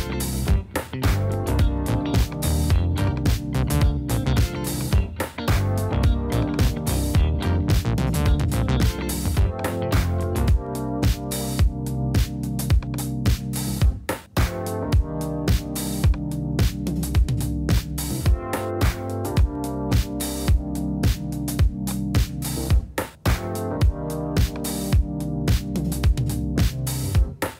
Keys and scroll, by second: 0.0-0.6 typing, 8.6 super+z, 11.6 super+z, 14.1 super+z, 19.7 super+z, 24.7 super+z.